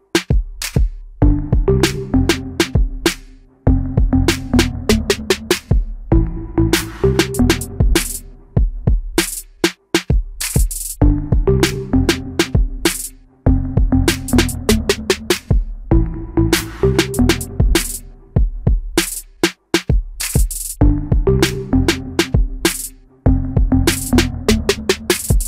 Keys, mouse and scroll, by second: 4.3 ctrl+z, 5.7 shift+middle click, 11.1 Delete, 14.1 ctrl+z, 17.5 Delete, 19.0 ctrl+z, 21.5 shift+middle click.